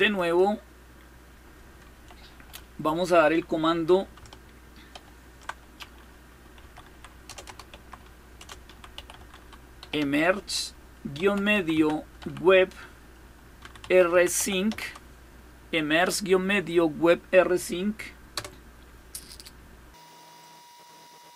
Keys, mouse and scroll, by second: 0.0 click, 4.8 ctrl++, 6.1-12.0 typing, 13.1-15.0 typing, 18.2 Return, 20.5-21.3 scroll down 4.